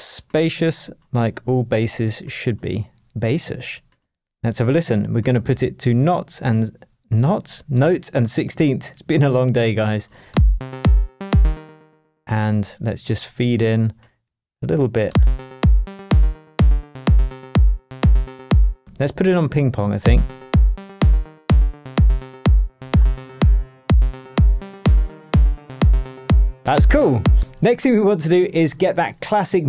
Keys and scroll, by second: 27.3 space.